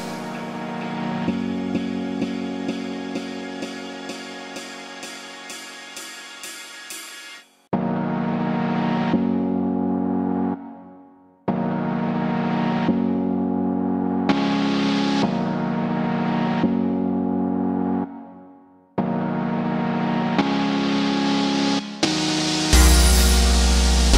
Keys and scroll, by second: 8.4 5, 8.6 Return, 21.9 1, 22.4 Tab, 23.0 0.